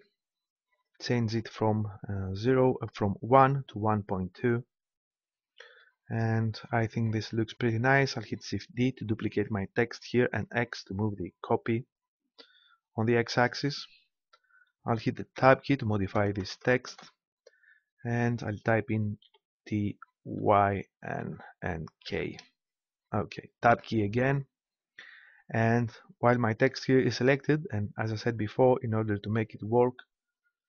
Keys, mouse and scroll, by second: 9.0 shift+d, 13.5-15.3 drag, 15.3 Tab, 16.1 BackSpace, 16.4 BackSpace, 16.6 BackSpace, 16.9 BackSpace, 19.3 shift+t, 20.4 shift+y, 21.2 shift+n, 22.0 shift+k, 23.6 Tab.